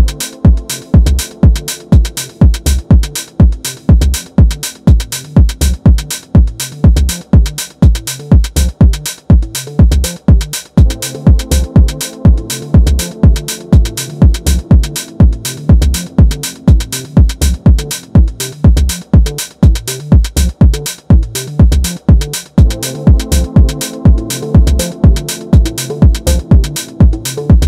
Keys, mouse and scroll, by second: 1.7 click, 2.8 scroll down 1, 2.9 middle click, 3.6 KP_1, 4.2-7.7 shift+middle drag, 9.5-12.7 middle drag, 14.1 KP_7, 16.7 e, 21.1 click, 22.5-25.7 middle drag, 25.9 alt+shift+click, 27.3 r.